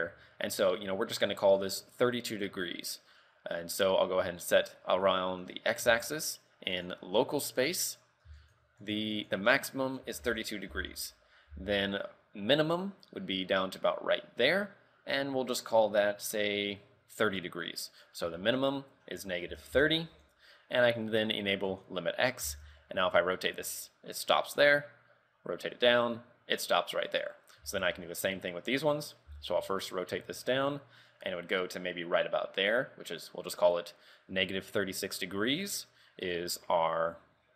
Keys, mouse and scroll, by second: 6.6 click, 6.9 click, 8.5 ctrl+click, 9.3 ctrl+click, 11.7 r, 18.1 ctrl+click, 22.0 click, 22.8 r, 27.6-27.9 scroll down 2, 27.9 shift+middle click, 28.9 right click, 29.6 r, 35.2 click.